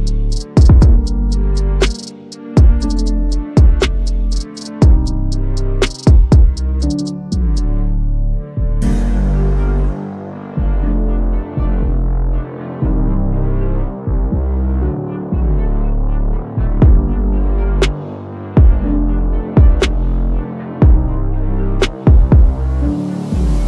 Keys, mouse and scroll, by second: 3.1-3.6 click, 3.9-5.1 typing, 5.5 click, 11.3-12.5 drag, 12.8-13.7 drag, 21.5 click, 23.2 click.